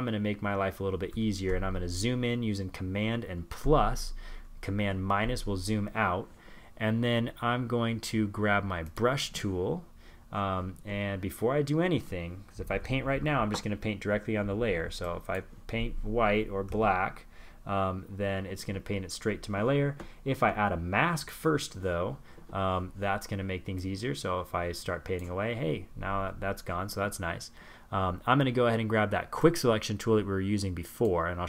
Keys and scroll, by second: 1.6 super+=, 14.6 super+z.